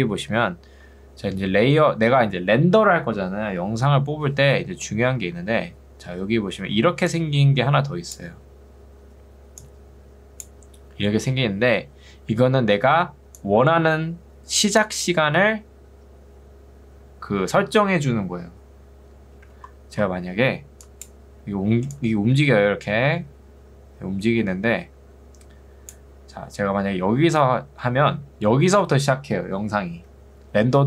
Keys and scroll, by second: 0.0 Escape, 6.8 ctrl+2, 11.8 Escape.